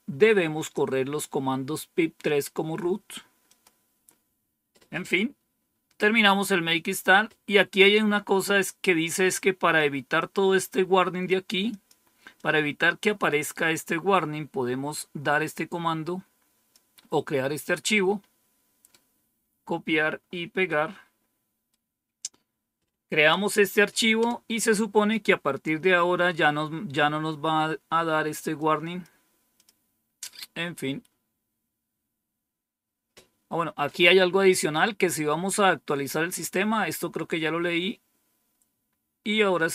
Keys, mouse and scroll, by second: 3.4 click, 5.5-6.1 scroll down 2, 6.1-6.8 scroll down 1, 10.0-11.2 drag, 11.6 click, 12.2-13.5 drag, 15.3-16.6 drag, 17.8-18.8 right drag, 20.5-21.6 right drag, 24.1 Return, 28.4 click, 29.4 click, 29.9-30.7 scroll down 2, 37.0-38.1 scroll down 3.